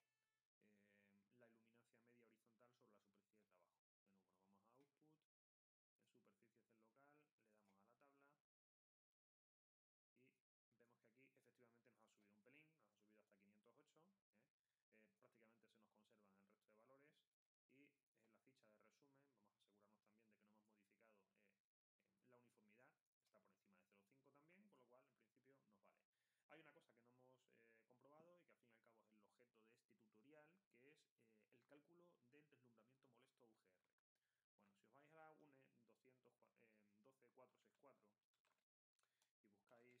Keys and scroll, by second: 37.9-40.0 typing.